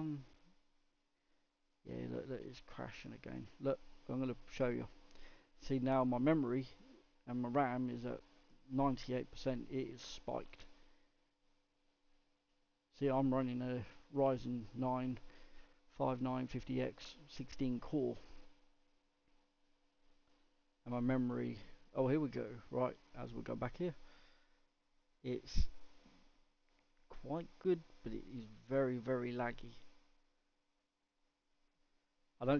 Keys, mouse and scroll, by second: 21.0 click, 23.9-24.7 middle drag, 24.7-25.6 scroll up 1, 25.6-32.5 middle drag.